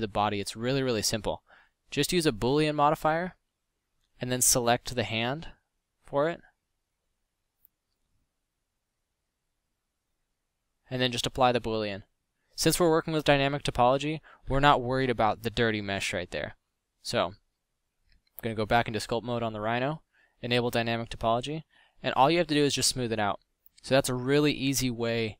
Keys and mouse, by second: 4.3 z, 5.0 z, 9.0 middle click, 9.3 z, 12.5 z, 13.5 m, 14.4 x, 21.5 f, 23.7 f.